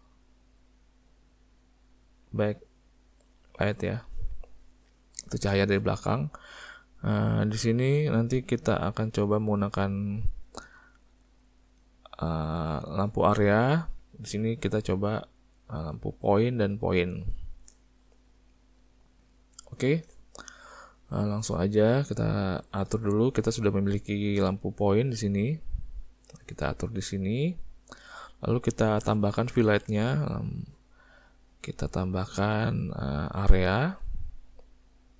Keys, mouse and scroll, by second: 0.4 click, 1.2 click, 1.6 click, 1.8 click, 2.0 click, 2.1 click, 2.7 click, 2.9 click, 3.1 click, 3.4 click, 3.8 click, 7.7 click, 9.3 click, 9.8 click, 16.2 click, 16.9 click, 18.5 middle click, 19.7 middle click, 20.9 middle click, 21.7 middle click, 22.1 `, 24.6 click, 25.6 click, 26.3 click, 29.7 shift+a, 34.7 click.